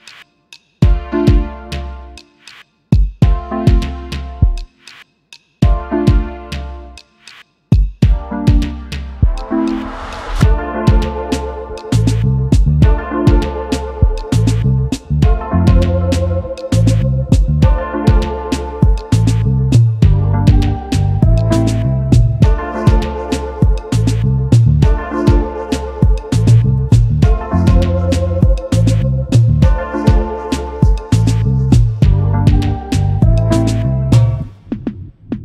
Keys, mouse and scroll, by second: 0.4 alt+scroll up 1, 1.6 alt+scroll, 1.8-2.1 alt+scroll down 1, 4.8-5.3 alt+scroll up 1, 5.5 right click, 6.9 double click, 9.6 shift+click, 11.2 double click, 13.2 shift+click, 16.6 shift+click, 24.7 alt+scroll up 1, 24.8-25.5 alt+scroll down 1, 26.0 alt+scroll up 1, 26.6 double click, 32.6-33.1 alt+scroll down 1, 33.3 space, 33.4 double click.